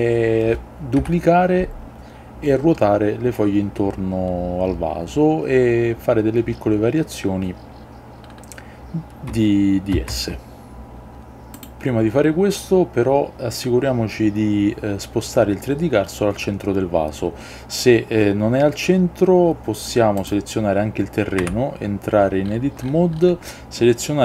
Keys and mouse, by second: 1.1 KP_7, 10.1 shift+d, 11.1 y, 11.7-20.9 drag, 21.5 Tab.